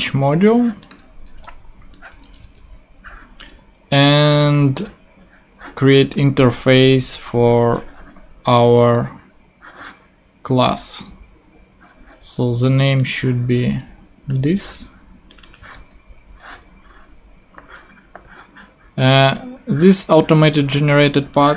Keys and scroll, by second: 0.0 super+Tab, 1.8 shift+Up, 2.2 Return, 2.4 super+v, 6.8 Return, 14.4 super+c, 16.5 super+v.